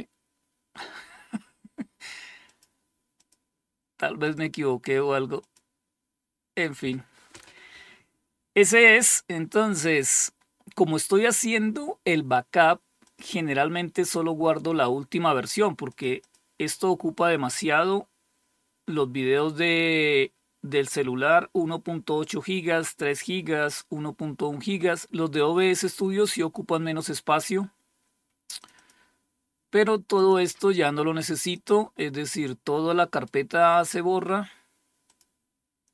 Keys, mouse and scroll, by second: 1.9 click, 2.6 click, 2.9 click, 3.7 click, 4.8 click, 8.4 click, 12.5 click, 15.3 click, 15.6 click, 28.0 click, 29.6 click, 29.8 click, 30.9 click, 31.5 click, 32.5 right click, 34.5 click.